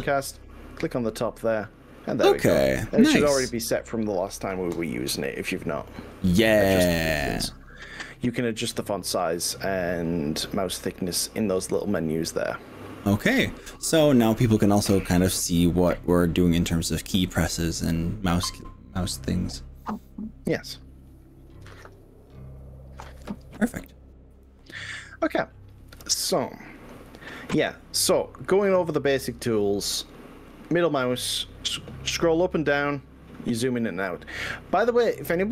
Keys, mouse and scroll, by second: 4.1 click, 4.9 click, 11.5 click, 11.9 n, 28.7-29.3 scroll down 4, 29.3-29.7 scroll up 3, 29.9-30.3 scroll down 2, 30.5 middle click, 30.8-35.5 middle drag.